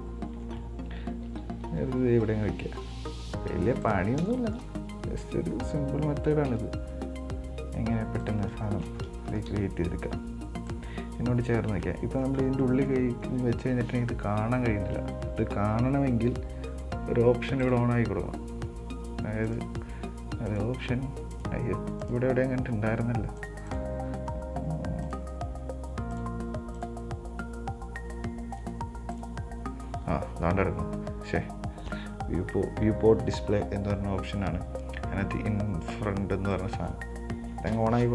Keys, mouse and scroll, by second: 1.6 g, 4.5-5.5 shift+middle drag, 5.5-5.8 scroll up 2, 5.8-6.8 scroll down 5, 6.8 s, 8.8 scroll down 1, 8.9 shift+middle click, 9.6 KP_1, 9.8 KP_3, 10.9-12.1 drag, 12.1 scroll down 2, 12.2-12.6 middle drag, 12.6 scroll up 3, 12.8-15.1 middle drag, 15.1 scroll down 1, 15.2-17.8 middle drag, 17.8-29.7 drag, 30.7-33.7 scroll down 5, 36.7-37.9 drag, 37.9 KP_1.